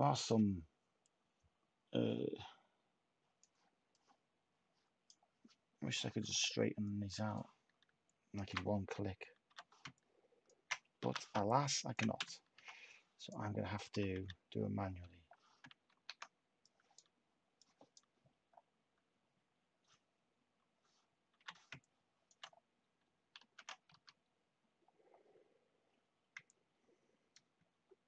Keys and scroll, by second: 6.0 /, 9.4 h, 11.0 t, 12.1-12.5 typing, 13.8 u, 15.8 ctrl+z, 21.3 h, 23.4 ctrl+z, 23.9 z.